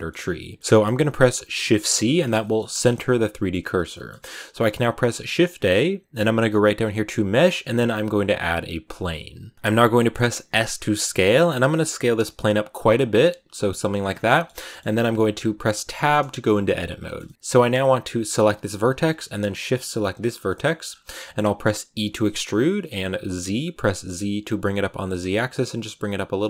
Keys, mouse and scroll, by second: 1.5 shift+c, 2.1-8.9 shift+middle drag, 9.9 middle click, 10.4 s, 12.7 scroll down 3, 13.0 s, 14.0 scroll down 2, 14.2-15.7 middle drag, 15.7 Tab, 16.9 shift+middle click, 17.3 a, 18.2 right click, 19.9 shift+right click, 20.2 scroll down 3, 20.3 middle click, 20.7-21.8 scroll up 2, 21.8 e.